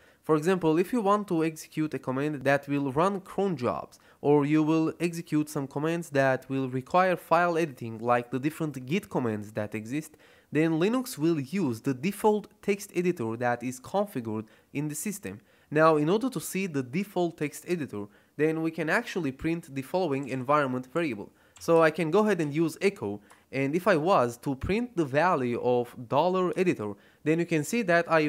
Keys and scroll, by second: 19.9-22.3 typing, 26.4 Return.